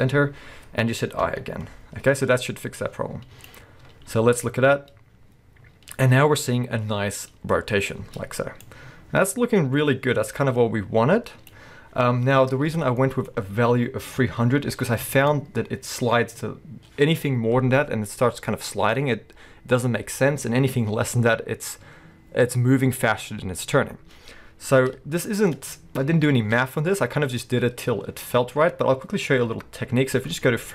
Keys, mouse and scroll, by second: 4.1 space, 8.0 space, 13.0-30.7 shift+middle drag, 13.3-14.8 scroll up 1, 14.8-15.1 scroll down 1, 15.4-17.4 scroll up 1, 27.5-28.0 scroll up 2, 28.0 scroll up 1, 28.3-30.7 scroll down 2.